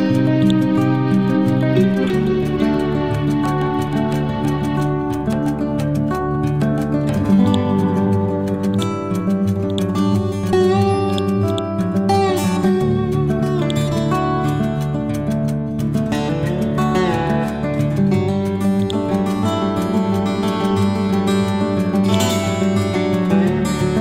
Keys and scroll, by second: 15.8 F12, 17.1 5, 17.3 Return.